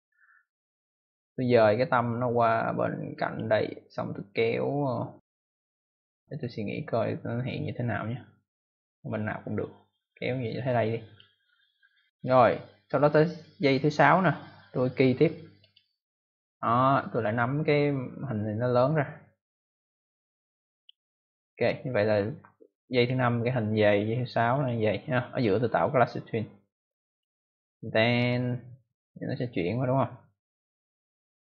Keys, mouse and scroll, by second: 2.0 click, 8.8 click, 13.5 click, 15.5 click, 17.7 click, 22.8 click, 24.5 click, 25.3 click, 25.5 right click, 27.0 click, 28.2 click.